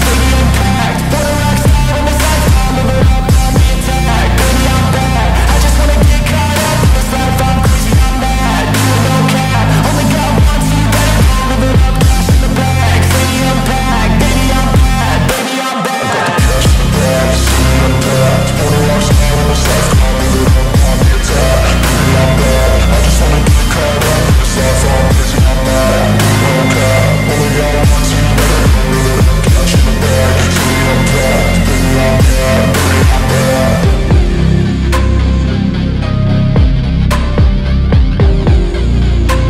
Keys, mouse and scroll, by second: 0.8 alt+click, 2.1 alt+middle click, 2.2 scroll up 1, 2.5 alt+middle click, 3.6 z, 5.2 shift+click, 5.5 right click, 6.7 scroll down 1, 6.9 alt+middle click, 7.3 scroll up 1, 8.5 shift+click, 8.7 right click, 11.6 alt+click, 14.9 alt+click, 16.5 alt+scroll down 2, 16.8 alt+middle click, 17.6 alt+scroll up 1, 20.7 Return, 22.0 alt+middle click, 24.6 Return, 27.7 alt+click, 29.2-29.5 scroll down 1, 30.1 scroll up 1, 30.3 scroll down 1, 30.4 alt+middle click, 30.7-31.0 alt+scroll up 2, 31.0 alt+middle click, 31.5 alt+click, 34.0 scroll up 1, 35.1 alt+middle click, 37.0 alt+middle click, 38.3 alt+middle click, 38.7-39.2 scroll up 1, 39.2 typing.